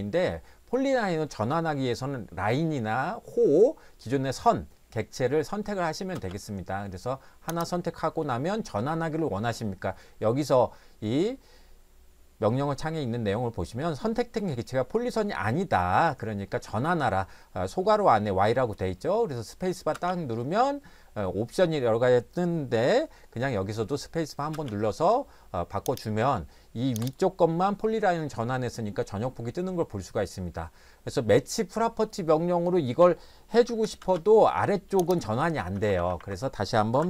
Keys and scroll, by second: 6.1 space, 19.9 space, 24.5 space, 33.6-34.0 typing, 35.7 Escape, 35.9 Escape, 36.2 Escape, 36.9 p.